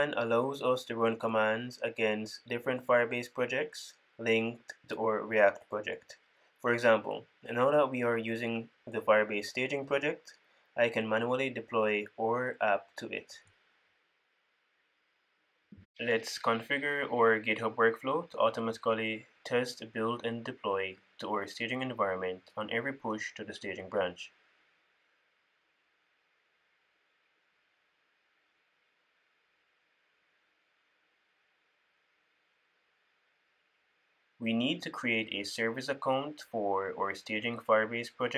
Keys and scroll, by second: 17.6 super+w, 19.5 ctrl+`, 26.6 super+c, 28.9 super+v.